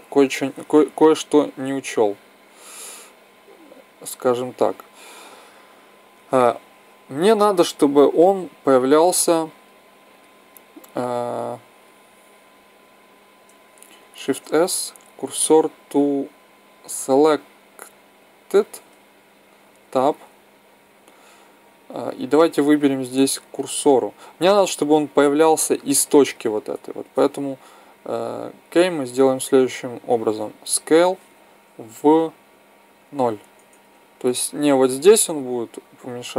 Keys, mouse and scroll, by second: 1.5-3.7 drag, 6.3-8.1 middle drag, 9.4-11.8 drag, 11.8 Tab, 14.2 shift+s, 19.5 Tab, 22.6-25.9 drag, 26.9 Tab, 28.9 a, 29.3 a, 30.6 s.